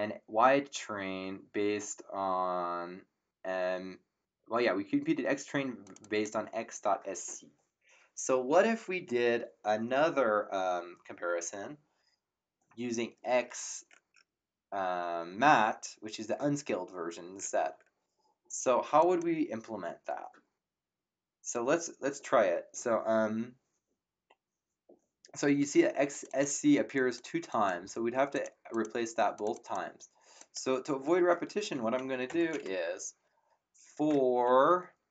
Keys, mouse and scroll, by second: 5.8 click, 18.9 click, 26.1 click, 32.2 Return, 32.2 KP_Enter, 33.5-34.9 typing.